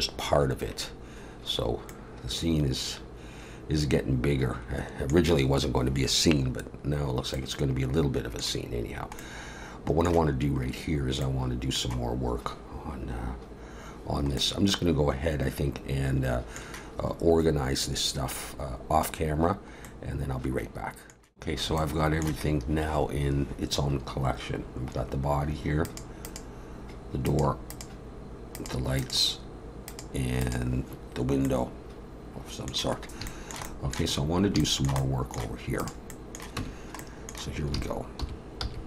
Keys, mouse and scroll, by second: 1.9 middle click, 7.3 middle click, 14.4 middle click, 19.8 middle click, 25.9 click, 26.4 click, 31.4 middle click, 33.0 scroll up 1, 33.3 shift+middle click, 33.6 middle click, 34.2 scroll up 2, 34.6 shift+middle click, 35.0 middle click, 35.8 click, 36.2 middle click, 36.6 Tab, 37.0 middle click, 37.8 alt+a, 38.3 3, 38.6 c.